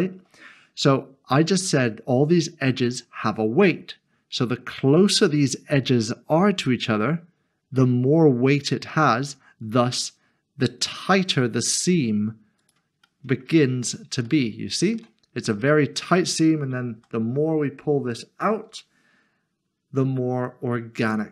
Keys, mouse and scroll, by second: 12.6 click, 13.0 middle click, 14.0 scroll up 1, 14.3 shift+middle click, 17.0 g, 18.7 typing, 21.0 click.